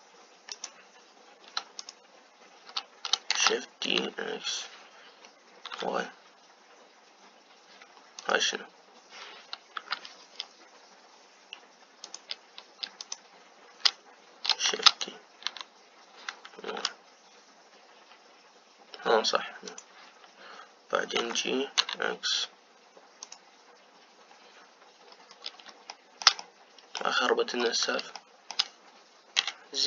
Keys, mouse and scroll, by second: 0.7 Delete, 1.5-4.6 drag, 4.6 shift+d, 11.3 Delete, 13.0-15.9 drag, 15.9 shift+d, 22.4 g, 26.2-26.8 scroll up 2, 26.8-28.2 shift+middle drag, 28.2-29.1 scroll up 2, 29.1 scroll up 1, 29.1-29.8 shift+middle drag.